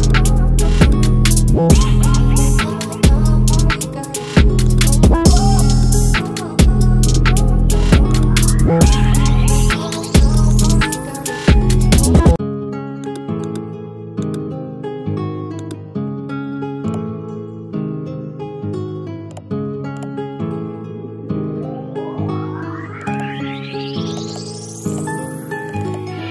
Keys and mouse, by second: 6.5-8.2 alt+drag, 19.1 click, 23.6 click.